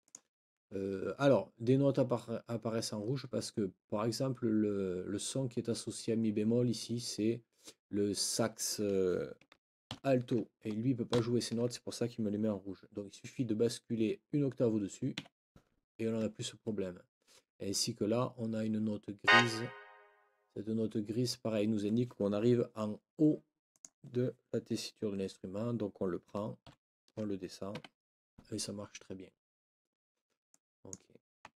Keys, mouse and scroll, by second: 0.0 click, 8.6 click, 9.9 shift+Right, 11.1 ctrl+Up, 15.2 Escape, 19.2 click, 23.7 click, 26.6 ctrl+Down, 27.7 Escape, 30.5 click.